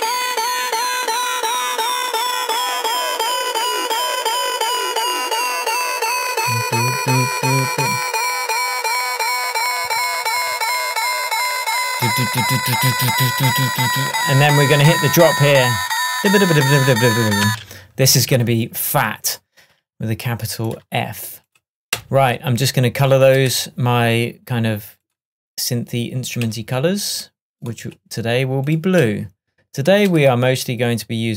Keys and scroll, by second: 17.5 space.